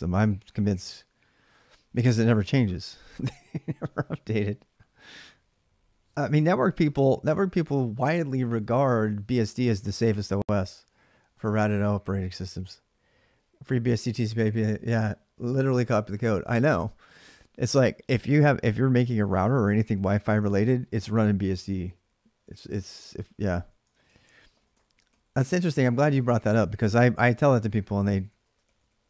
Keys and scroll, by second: 23.8-29.0 typing.